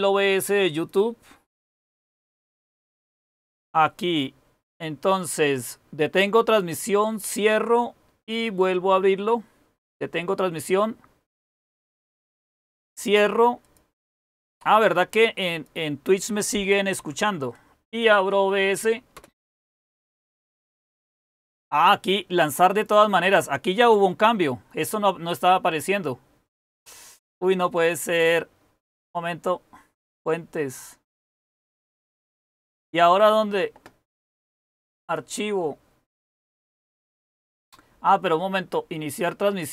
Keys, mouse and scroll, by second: 16.9 Up, 19.1 Return.